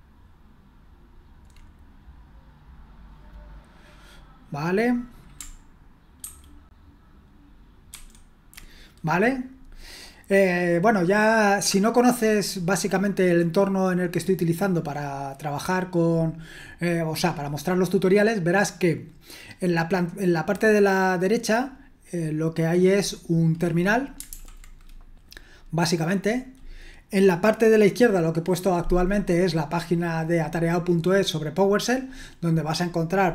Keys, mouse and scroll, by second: 6.2 ctrl+2, 7.9 ctrl+1, 24.3 super+l.